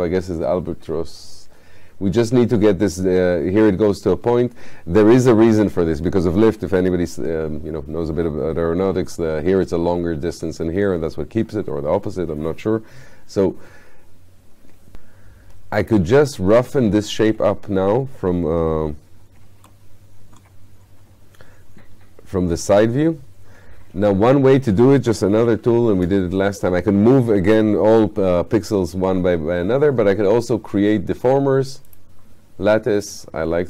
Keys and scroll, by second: 25.5 F8.